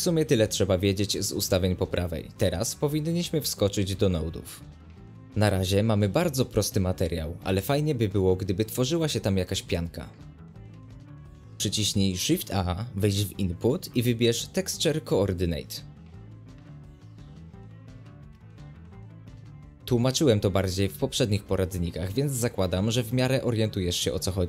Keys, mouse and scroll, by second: 2.3 space, 2.6 click, 8.5 scroll up 1, 8.6-9.9 middle drag, 9.9 click, 10.0 space, 10.2 g, 11.1 space, 11.2 scroll up 1, 11.4-12.5 middle drag, 12.5 click, 21.0 ctrl+shift+click, 21.1 ctrl+shift+click, 21.3 ctrl+shift+click, 21.7-24.4 drag.